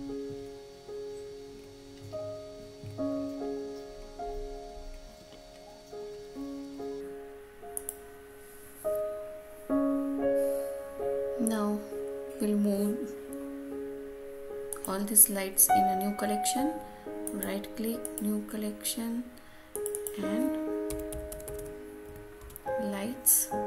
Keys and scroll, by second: 21.2 Return.